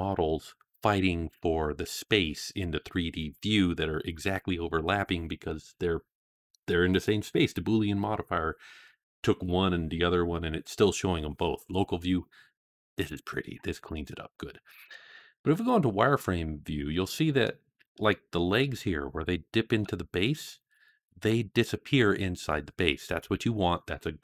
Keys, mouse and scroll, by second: 13.8-14.4 scroll up 2, 14.5-15.3 scroll down 2, 15.3 z, 17.3-17.7 middle drag, 17.9-18.4 shift+middle drag, 18.5-19.0 scroll up 6, 19.2-19.5 shift+middle drag, 20.6-20.9 middle drag, 22.7-23.2 scroll down 4.